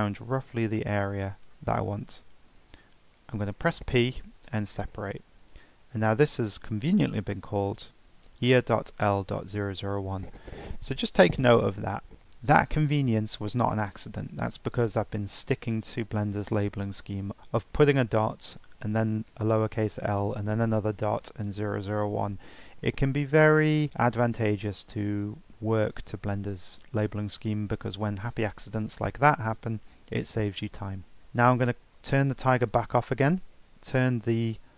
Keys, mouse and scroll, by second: 3.8 p, 31.2 Tab, 31.4 click, 32.6 click.